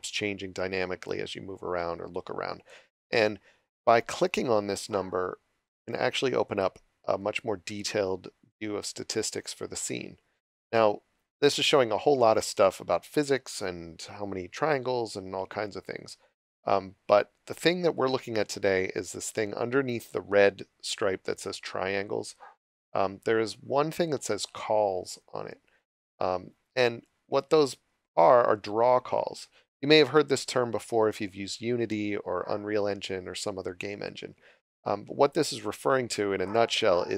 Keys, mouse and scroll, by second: 6.4 click, 27.0 click.